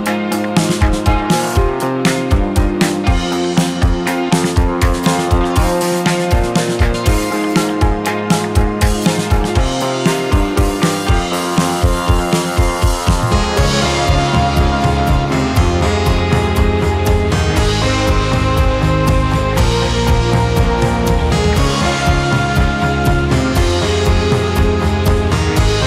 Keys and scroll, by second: 1.0 4, 6.3 5, 12.1 Delete, 13.3 2, 20.3 space, 22.0 2.